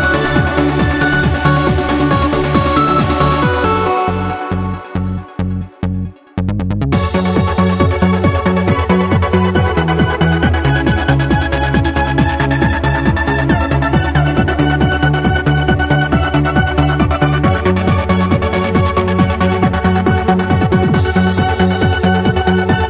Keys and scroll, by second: 1.2 w, 2.9 q, 7.8 w, 10.9 w, 13.7 w, 18.6 q.